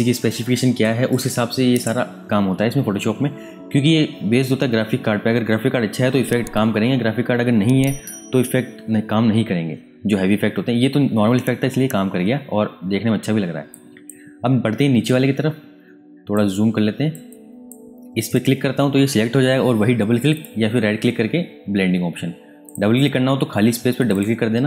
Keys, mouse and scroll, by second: 12.7 space, 13.7 click, 14.8 space, 15.0 click, 15.4 space, 16.5 ctrl+click, 20.3 right click, 22.6 click.